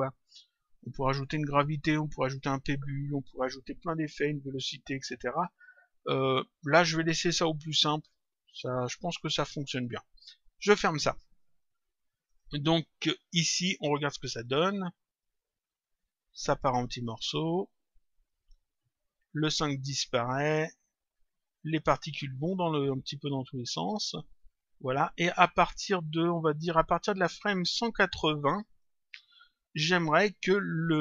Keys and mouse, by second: 10.5 click, 12.2 click, 14.3 click, 26.4 click, 28.5 click.